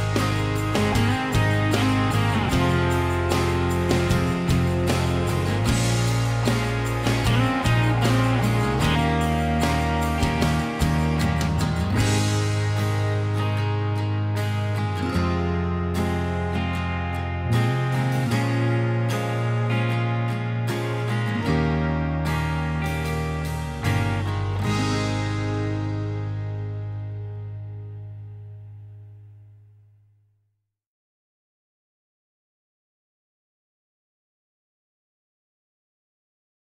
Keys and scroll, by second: 4.8 ctrl+a, 5.4 ctrl+h, 18.6 b, 19.8 Escape, 35.7 2.